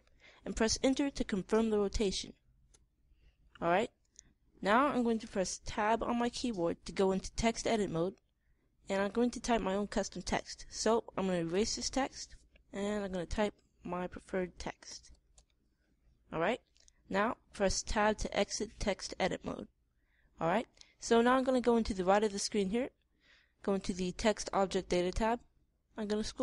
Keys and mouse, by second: 6.3 Tab, 12.0 BackSpace, 12.2 BackSpace, 13.7 f, 14.7 a, 15.3 z, 15.8 e, 18.5 Tab, 24.6-26.4 middle drag.